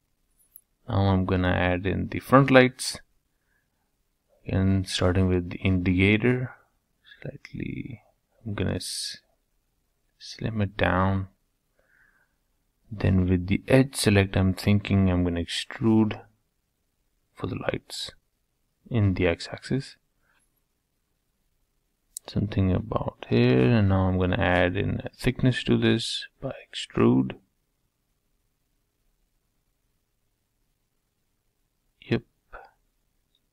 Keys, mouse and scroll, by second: 1.2 shift+d, 3.4 g, 5.7 s, 8.2 s, 10.6 g, 13.0 middle click, 13.6-14.4 scroll up 2, 14.4 2, 14.9 click, 15.8 e, 20.9-22.8 middle drag, 23.3 3, 23.6 click, 24.5-26.5 middle drag, 28.0 e, 31.1 2, 31.5 click, 32.1 g.